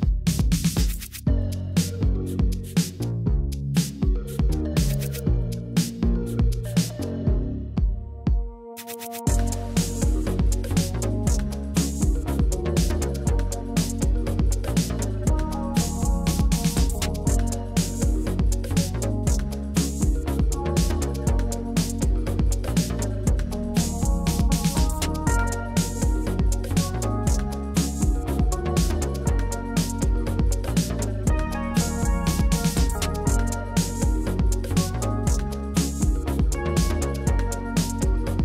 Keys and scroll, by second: 1.3 ctrl+d, 1.5 shift+Right, 1.7 shift+Right, 1.7 shift+Right, 2.5 Right, 4.1 Right, 29.1 ctrl+v, 32.2 ctrl+c, 33.6 ctrl+shift+v, 36.0 ctrl+c, 37.4 ctrl+shift+v, 38.0 ctrl+z.